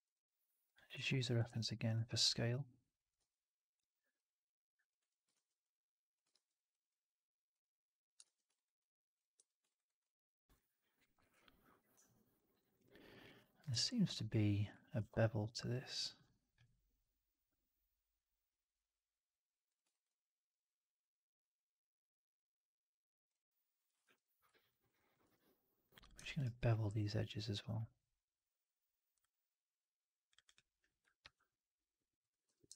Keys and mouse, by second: 0.5 click, 0.9 alt+middle drag, 1.1 alt+right drag, 1.3 shift+x, 1.8 r, 3.0 w, 4.0 click, 4.9 1, 5.2 shift+x, 5.6 click, 6.2 shift+x, 6.6 click, 7.4 click, 8.4 right click, 8.7 click, 9.2 4, 9.6 alt+right drag, 9.7 alt+right drag, 9.9 alt+click, 12.2 alt+right drag, 12.5 alt+right drag, 12.7 alt+click, 13.0 alt+middle click, 13.2 alt+right click, 13.4 alt+click, 13.6 2, 14.9 alt+b, 19.8 alt+right click, 19.9-23.2 alt+drag, 23.9 4, 24.6 alt+right click, 24.8 alt+click, 25.1 2, 25.7 click, 25.9 click, 26.3 alt+right click, 26.8 alt+b, 31.1 alt+b, 32.4 4, 32.6 alt+right drag, 32.7 alt+right drag.